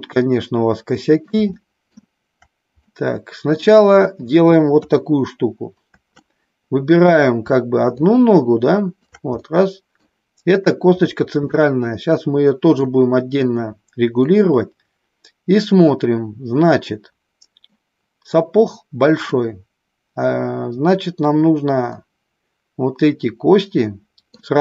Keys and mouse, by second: 1.6 shift+middle click, 2.9 middle click, 4.6 KP_3, 6.2 middle click, 8.0-9.0 shift+drag, 9.4 middle click, 11.4-12.9 middle drag, 14.3-15.6 middle drag, 17.6-19.4 middle drag, 21.9-24.4 middle drag.